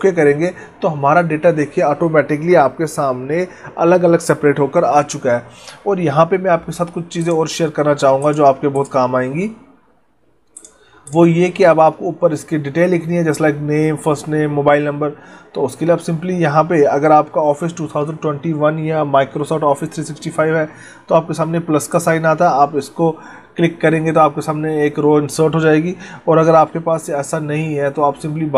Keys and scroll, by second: 26.6 ctrl+z.